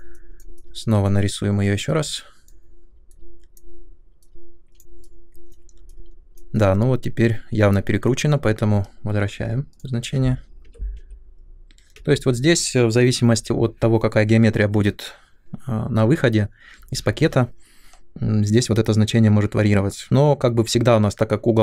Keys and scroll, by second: 10.6-11.9 typing, 13.3 BackSpace.